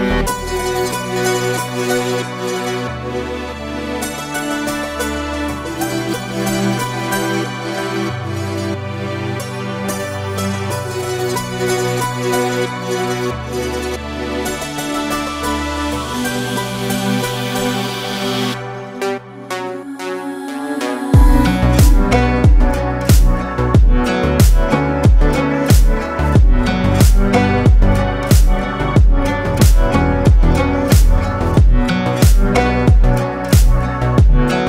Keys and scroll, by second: 11.2 ctrl+3.